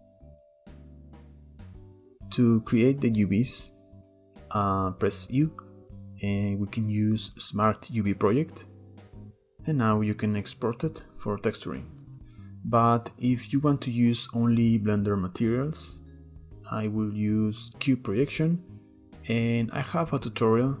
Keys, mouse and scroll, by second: 3.4 click, 4.2-9.3 middle drag, 15.9 scroll up 2, 19.0 u, 20.0-20.8 middle drag.